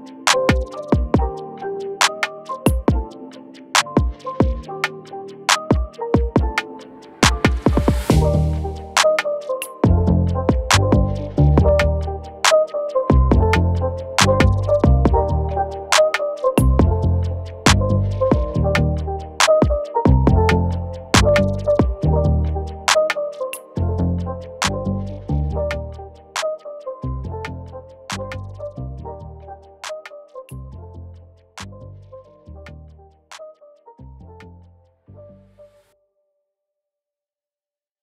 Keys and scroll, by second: 0.5 alt+space, 2.2 space, 5.2 ctrl+Return, 6.4 ctrl+-, 6.6 ctrl+-, 15.2 ctrl+Insert, 17.9 ctrl+d, 18.8 ctrl+d, 19.5 ctrl+z, 19.8 ctrl+z, 21.3 ctrl+z, 24.2 ctrl+j, 29.5 ctrl+Insert, 31.9 alt+BackSpace, 33.1 ctrl+d.